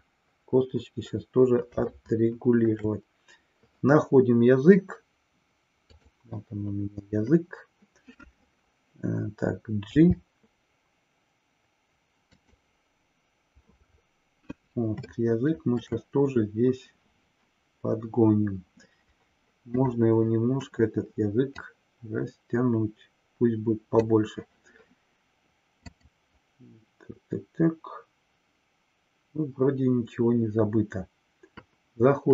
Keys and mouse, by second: 2.1-2.7 shift+middle drag, 5.8 click, 12.4 click, 15.1-15.9 shift+middle drag, 19.7 click, 21.5-24.1 drag, 25.8-32.3 drag.